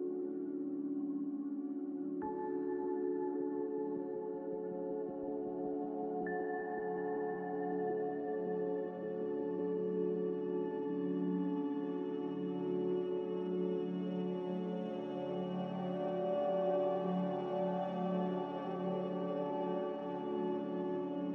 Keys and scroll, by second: 0.0-0.2 typing, 2.3-4.4 typing, 9.5-10.4 typing, 13.5 2, 13.7 Return, 16.9 s, 19.2 z.